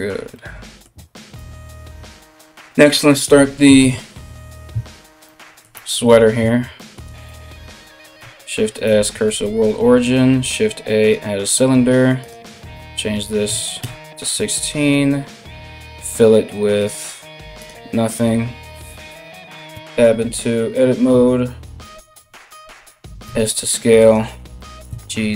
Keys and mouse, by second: 0.9 KP_1, 7.8 shift+s, 8.9 shift+a, 11.8-23.8 drag, 19.3 Tab, 22.8 s, 23.8-25.3 middle drag, 24.2 g.